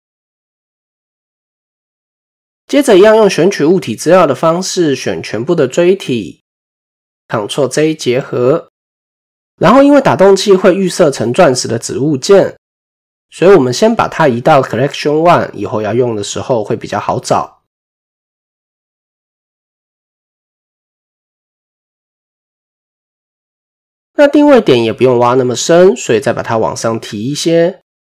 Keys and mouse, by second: 0.8 click, 0.9 typing, 1.5 click, 3.5-5.8 drag, 7.1 ctrl+j, 7.2 typing, 14.8 click, 16.8 typing, 18.0-19.4 drag, 22.0 KP_1, 23.8 click, 25.9-28.1 drag.